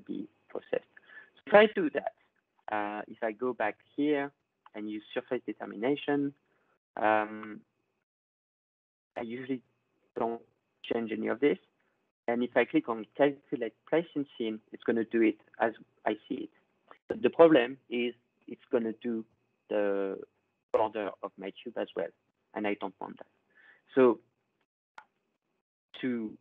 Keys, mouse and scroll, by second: 0.5 scroll, 1.1 middle click, 1.8-3.3 drag, 4.7 click, 7.8 click, 8.0 click, 16.2 click, 18.7-21.2 drag, 24.2 click, 24.8 click.